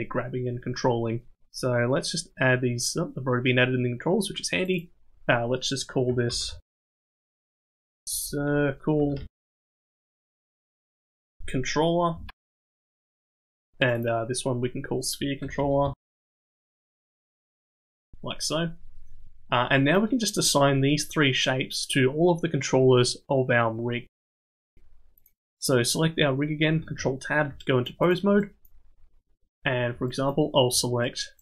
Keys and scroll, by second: 8.2 BackSpace, 11.4 l, 17.4 l, 26.8 ctrl+Tab.